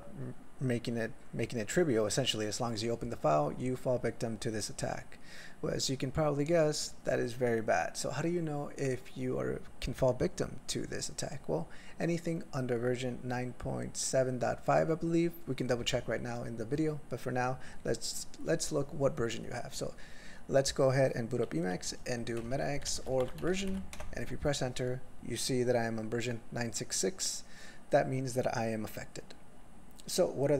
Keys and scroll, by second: 22.4 alt+x, 22.8-23.8 typing, 23.9 alt+x.